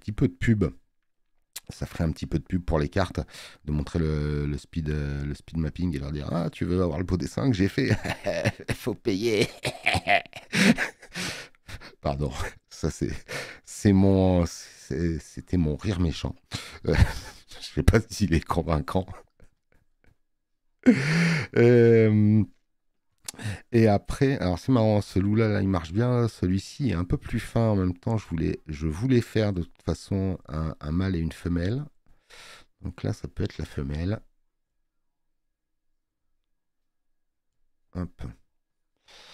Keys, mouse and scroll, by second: 0.5 space, 0.7 click, 18.7 click, 18.7 space, 23.1 space, 24.9 space, 26.5 click.